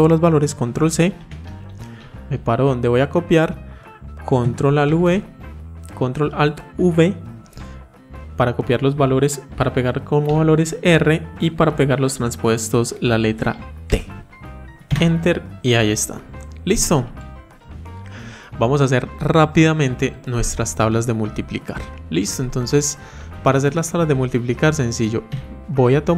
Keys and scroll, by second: 0.9 ctrl+c, 4.7 ctrl+alt+v.